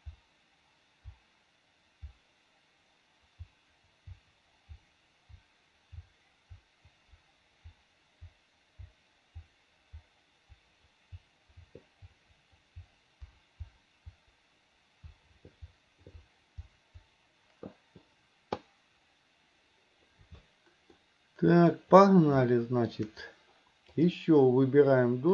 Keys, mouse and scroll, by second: 21.2 middle click, 22.7 shift+middle click, 24.2 click.